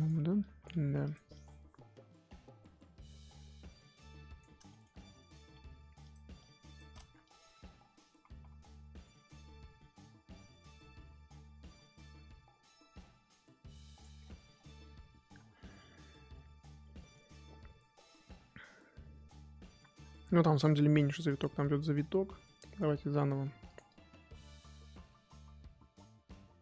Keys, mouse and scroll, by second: 0.1 scroll up 3, 0.4 click, 0.8 f, 1.3-4.7 drag, 4.7 shift+middle click, 5.6 f, 6.3 click, 7.0 ctrl+z, 7.2-14.2 drag, 14.2-17.4 scroll down 10, 17.4-19.0 scroll up 4, 19.0-19.6 scroll up 4, 23.4 f, 23.8-26.6 drag.